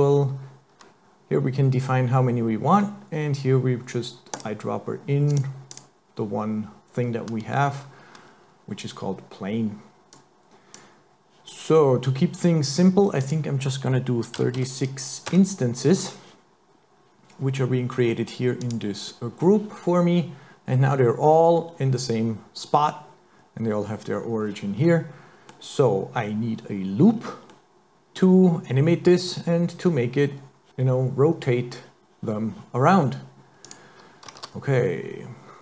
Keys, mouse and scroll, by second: 4.4 click, 5.7 click, 10.2 click, 13.2 click, 18.6 click, 24.8 middle click, 27.1-27.6 scroll down 4, 27.6 middle click, 33.7 click, 34.4 shift+a.